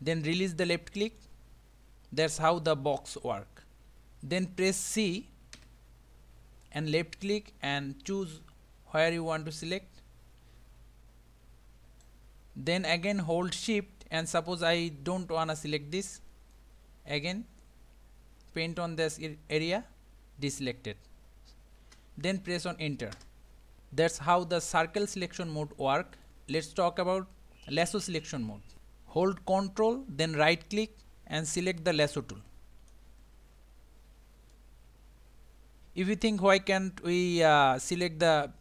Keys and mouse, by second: 2.4 middle click, 3.9 a, 5.5 c, 26.3 click, 30.3-32.9 ctrl+right drag, 34.6-37.5 middle drag.